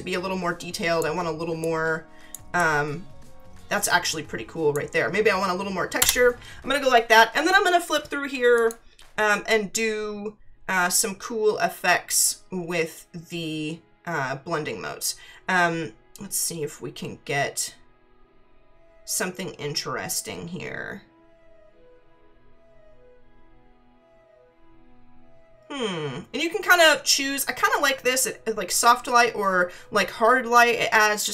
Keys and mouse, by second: 1.6 click, 6.0 Return, 8.5 click.